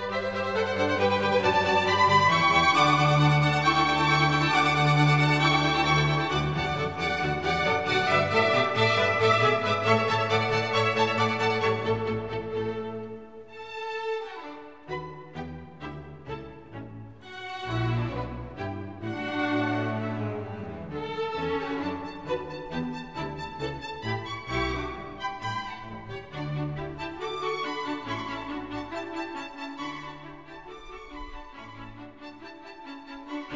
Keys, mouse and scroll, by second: 1.6 Tab, 2.4-3.5 BackSpace, 4.7 s, 5.0 a, 6.1-7.2 typing, 7.6 Tab, 10.0 s, 29.4 s, 32.1 click, 33.0 s.